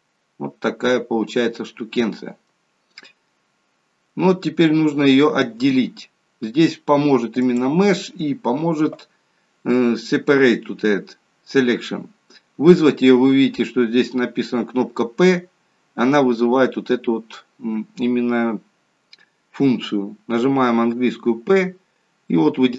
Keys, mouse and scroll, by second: 3.3 middle click, 4.7 middle click, 7.4 click, 21.5 p.